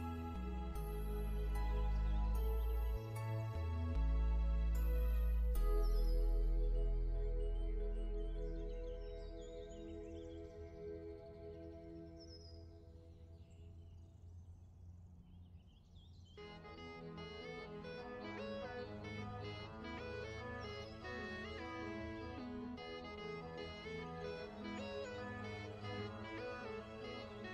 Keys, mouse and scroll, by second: 5.5 n, 6.0 click, 7.4 ctrl+z, 7.8 click, 9.4 v, 10.5 click, 10.8 v, 11.1 click, 15.0 alt+Num_Lock, 15.6 scroll up 1, 16.7-17.2 alt+shift+scroll down 3, 20.3 click, 23.5 click, 24.1 click, 24.9 click, 25.4 click, 26.3 click.